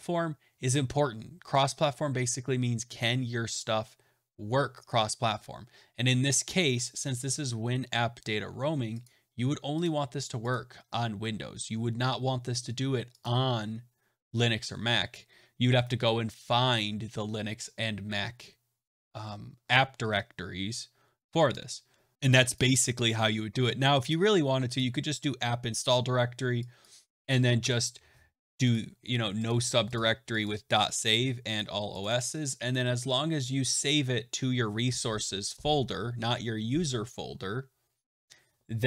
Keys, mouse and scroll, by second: 9.0 click, 9.8 click, 10.4 click, 13.2 right click, 16.4 click, 22.5 click, 24.0 click, 24.7 click, 26.7 click, 27.6 BackSpace, 28.6 click, 29.4 click, 29.9 click, 30.4 click, 31.0 click, 31.5 click, 31.9 click, 34.8 click, 37.9 click.